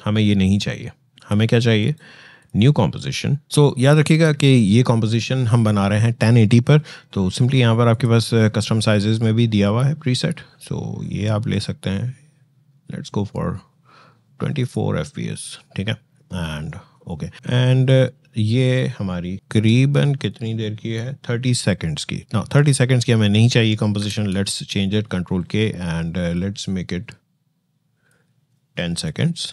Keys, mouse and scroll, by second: 0.9 click, 1.6 right click, 2.2 click, 6.4 scroll, 7.7 click, 14.4 click, 17.3-23.8 drag, 23.8 ctrl+k, 26.1-29.5 drag.